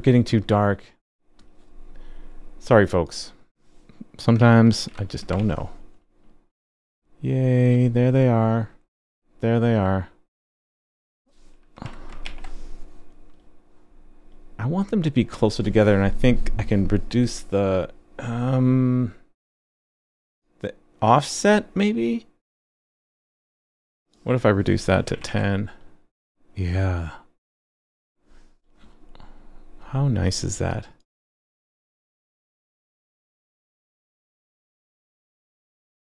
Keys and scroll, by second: 5.4 super+s, 12.2 super+s, 25.3 super+s.